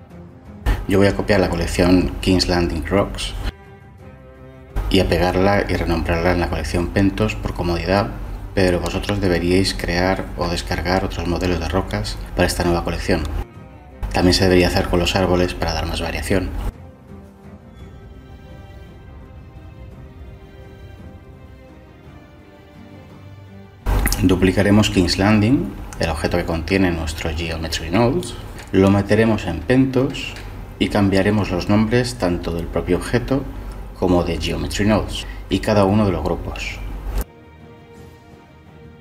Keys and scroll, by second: 7.4 ctrl+v, 13.2-15.7 typing, 23.3 Delete, 25.6 shift+d, 25.8 Escape, 28.3-29.2 typing, 31.8 typing, 33.5 Return, 33.5 typing.